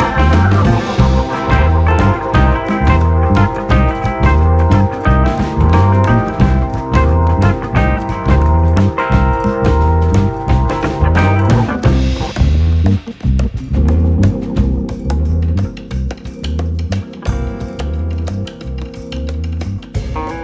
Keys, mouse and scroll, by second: 0.1 click, 1.2 /, 1.6-2.7 shift+middle drag, 2.7-4.1 drag, 5.7 click, 6.1-6.6 drag, 8.0 click, 8.2-9.3 middle drag, 9.3 drag, 10.1 click, 10.4 /, 11.1-12.4 shift+middle drag, 12.4 click, 13.5-15.6 drag, 15.6-16.8 scroll down 2, 16.8-20.4 drag.